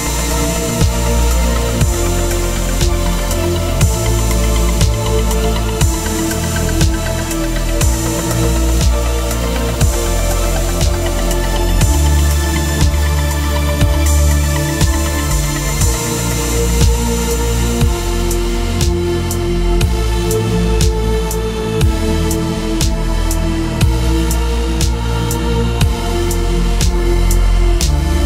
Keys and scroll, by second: 3.9 Return, 4.2 v, 4.3 Down, 5.1 Up, 5.6 Down, 5.9 Up, 6.1 Down, 6.9 Up, 8.7 Return, 9.7 t, 15.6 Return, 16.4 3, 17.3 ,, 18.6-21.6 typing, 21.8 Return.